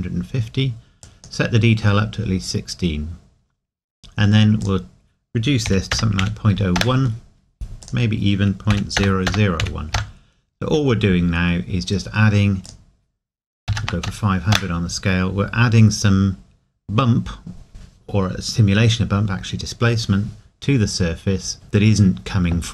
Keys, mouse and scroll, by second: 2.9-3.2 scroll up 1, 4.6 click, 5.7 KP_Decimal, 6.8 KP_Enter, 7.8 click, 8.7 KP_Decimal, 12.7 click, 13.7 KP_5, 15.7 scroll up 1.